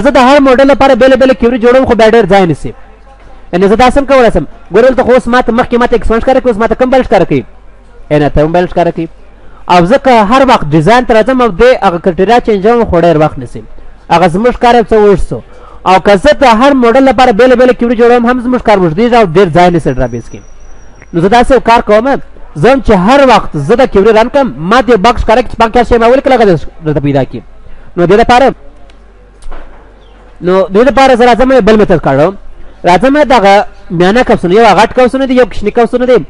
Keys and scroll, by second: 4.5 ctrl+s, 5.2 ctrl+w, 19.6 F9, 28.3 F9, 30.5 F9.